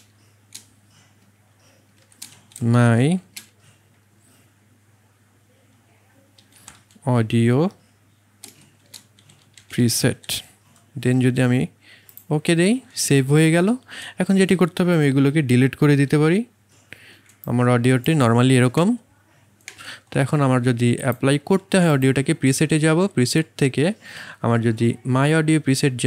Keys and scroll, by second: 2.0 shift+m, 2.3 y, 2.5 space, 3.1 a, 6.1-7.1 typing, 8.4-10.4 typing, 16.0 Delete, 18.8 space.